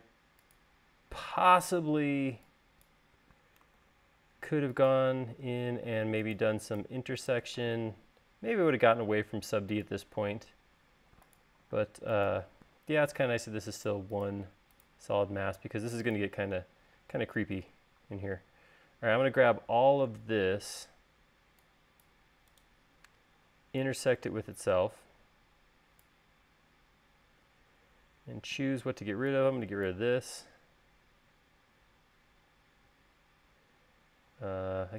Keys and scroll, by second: 1.9-2.4 typing, 3.9 super+z, 8.8 l, 11.9 space, 28.7 e.